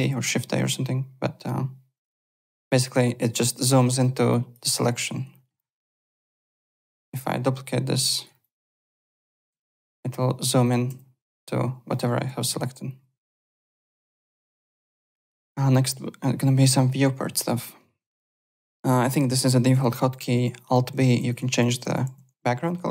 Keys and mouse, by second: 0.6 alt+Tab, 1.9 alt+click, 2.9 z, 4.3 click, 4.6 z, 5.9 alt+click, 7.0 alt+d, 7.9 click, 8.4 click, 9.5 z, 10.6 click, 10.9 z, 11.9 middle click, 12.1 z, 13.4 alt+Tab, 13.9 click, 18.1 click, 19.1 alt+middle click, 19.4 alt+click.